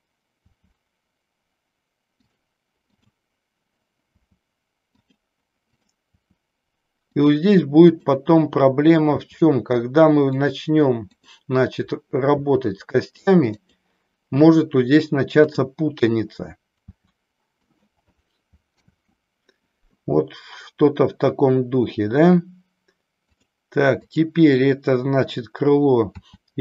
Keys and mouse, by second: 0.5 r, 2.9 click, 4.1 r, 5.0 click, 5.7 click, 6.5 r, 7.2 click, 10.4 click, 11.1 click, 12.4 r, 13.6 click, 16.9 r, 17.6 click, 18.7 ctrl+z, 24.1 click, 26.1 r.